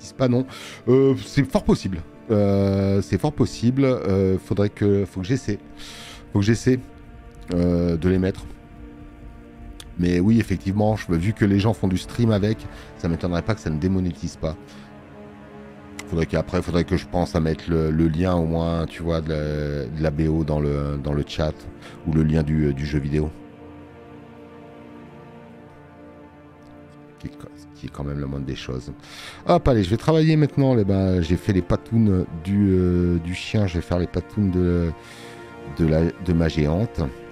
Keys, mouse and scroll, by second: 15.4 click, 19.2 click, 19.2 space, 28.9 alt+scroll up 1, 29.4 space, 29.6 click, 30.4 scroll up 2.